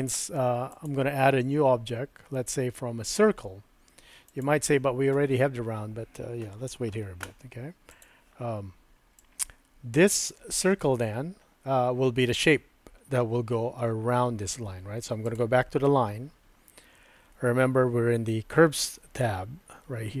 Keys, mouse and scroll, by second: 0.8-4.4 drag, 8.0 click, 9.2-10.3 drag, 15.3 click.